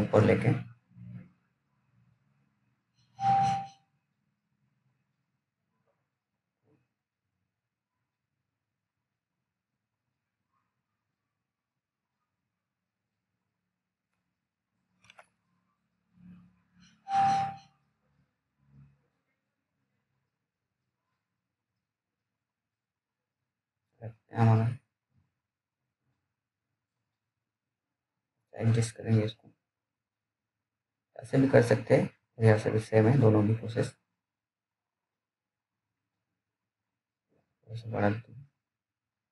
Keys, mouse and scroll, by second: 8.3 click, 9.8-11.0 scroll up 1, 11.0 c, 11.6-12.3 scroll down 1, 12.3 scroll down 1, 12.6 click, 12.6 click, 14.6 F3, 16.4 click, 20.6 click, 20.9 click, 32.9 click.